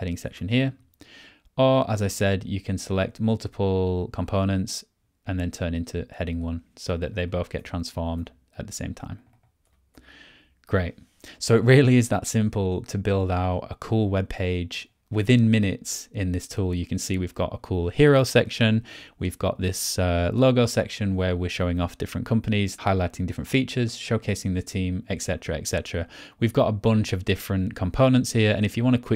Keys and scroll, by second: 0.2 BackSpace, 2.0 BackSpace, 7.5 BackSpace, 9.6 BackSpace.